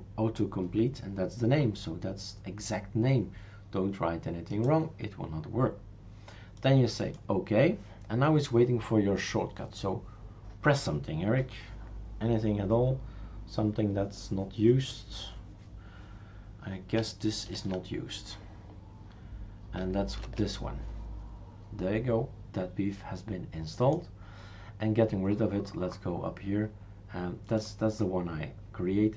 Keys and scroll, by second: 17.5 super+à, 20.2 super+à.